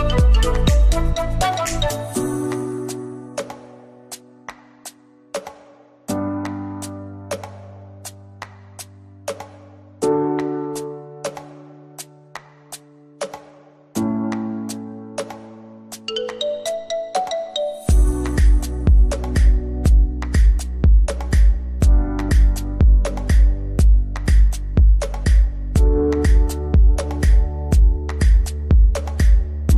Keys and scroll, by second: 2.2 ctrl+space, 2.6 ctrl+k, 3.3 Escape, 5.3 ctrl+z, 6.4 F4, 7.0 Escape, 9.8 Escape, 11.5 ctrl+z, 16.0 Escape, 17.0 c, 21.7 shift+F2, 21.9 F3, 22.4 Escape, 27.8 g.